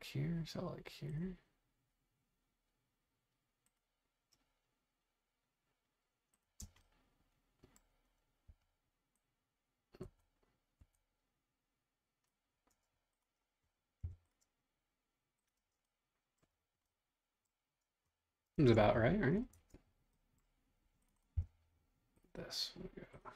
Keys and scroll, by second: 6.6 space, 8.5 e, 10.0 Escape, 12.7 space, 14.0 p, 15.6 space, 18.5 super+Tab, 19.5 super+Tab, 21.3 l.